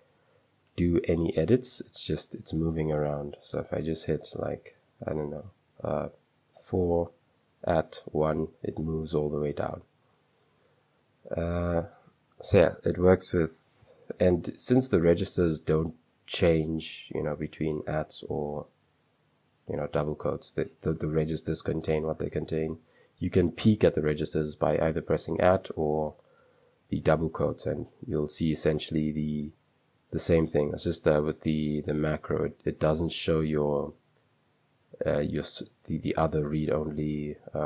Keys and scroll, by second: 1.1 typing, 6.6-8.8 typing, 10.0 typing, 14.7 @, 25.3 Escape, 26.1 ", 29.5 Escape, 29.7 @.